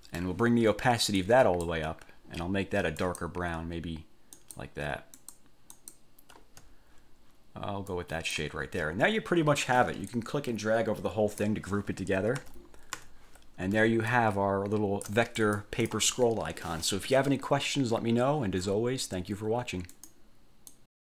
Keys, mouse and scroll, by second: 0.0 ctrl+middle click, 0.2 click, 1.4 click, 3.2 click, 4.6 click, 5.4 click, 5.9 click, 8.1 click, 10.3-11.8 drag, 12.6 ctrl+g, 13.1 ctrl+1, 14.2-15.4 ctrl+shift+drag, 15.6 ctrl+shift+click, 20.1 click, 20.8 click.